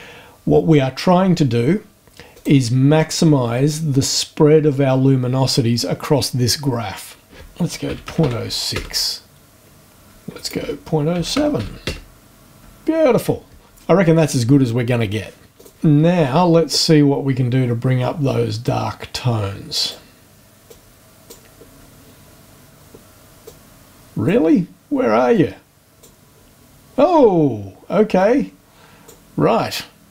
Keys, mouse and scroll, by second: 2.3 click, 7.9 KP_Decimal, 8.1 KP_0, 8.2 KP_6, 8.7 KP_Enter, 10.3 right click, 11.2 KP_Decimal, 11.3 KP_0, 11.5 KP_7, 11.8 KP_Enter, 15.5 click, 18.6-20.1 drag, 20.7 click, 23.4 click, 25.3 click, 28.1-29.3 drag.